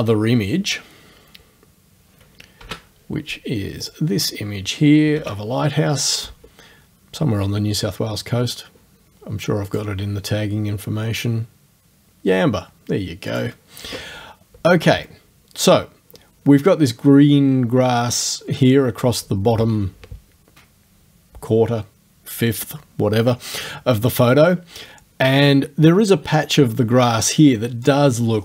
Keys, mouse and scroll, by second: 2.6 ctrl+f, 3.8 click, 5.2 ctrl+f, 9.7 click, 13.3 click.